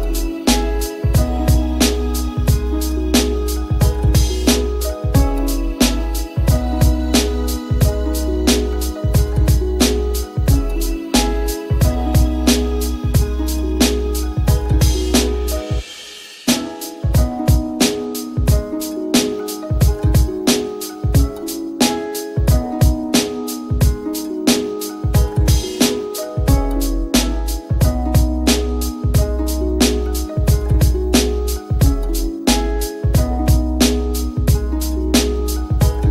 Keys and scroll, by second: 8.4-10.4 typing.